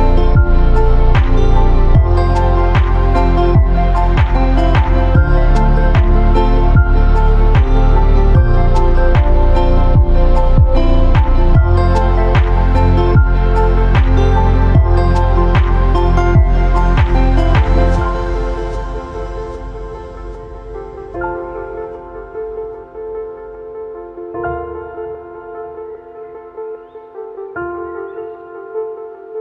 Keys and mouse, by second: 1.6 drag, 1.7 b, 3.5 click, 3.6 b, 4.7 click, 5.6 a, 5.9 b, 6.7-7.8 drag, 7.9 a, 8.3 ctrl+r, 9.3 a, 9.6 b, 10.7-12.0 drag, 12.2 a, 13.0 shift+click, 14.3 z, 15.0 a, 15.5 middle click, 15.8 click, 16.3 shift+middle click, 16.6 middle click, 17.6-21.7 drag, 21.7-22.1 middle drag, 22.7-24.1 drag, 24.4 e, 26.2 drag, 27.4 click, 28.4 x.